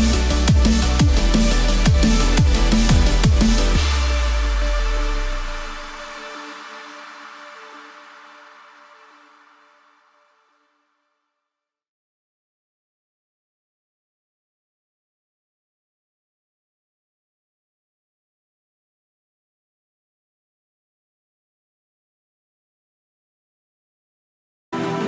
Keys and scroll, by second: 16.2 ctrl+d, 17.4 ctrl+0, 24.9 ctrl+-.